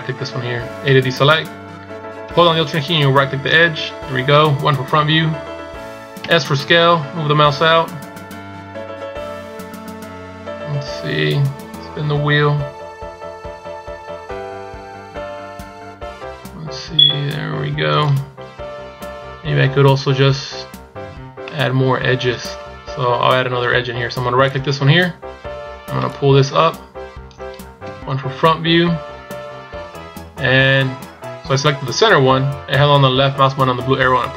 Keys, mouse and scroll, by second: 3.5 alt+right click, 4.7 KP_1, 6.4 s, 21.6 middle click, 24.6 right click, 26.1 click, 28.0 KP_1.